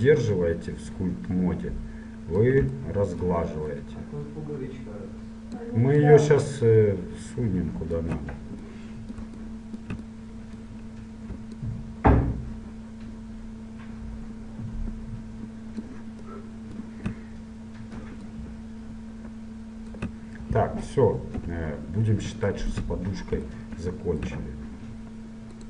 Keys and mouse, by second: 3.9-5.9 drag, 6.1-8.3 drag, 8.3-9.6 middle drag, 11.5-13.4 middle drag, 16.5 middle click, 18.4 middle click, 19.1-20.3 drag, 20.3-22.1 middle drag, 21.5 KP_7.